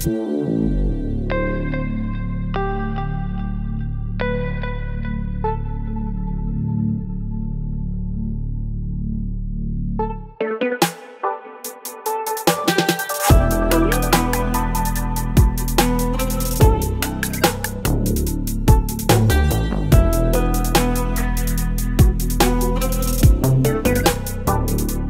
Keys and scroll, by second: 16.9 space.